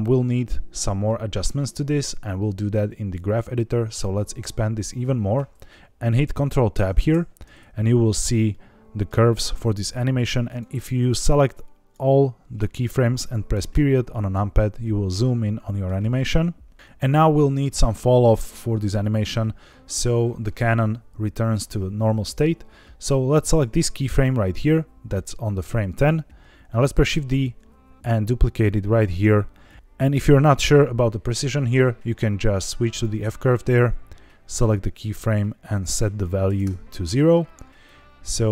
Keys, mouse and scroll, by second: 3.1-5.3 drag, 6.7 ctrl+Tab, 8.4 middle click, 10.2 click, 11.0 click, 13.6 KP_Decimal, 14.6 scroll down 5, 15.3 middle click, 18.9 click, 22.5-23.4 scroll down 3, 23.4 click, 23.9 click, 24.6-25.2 drag, 27.0 shift+d, 29.6 click, 29.7 ctrl+z, 29.7 h, 30.1 g, 30.9 Escape, 32.8 click, 34.4 click, 35.6 click, 37.8-38.5 drag.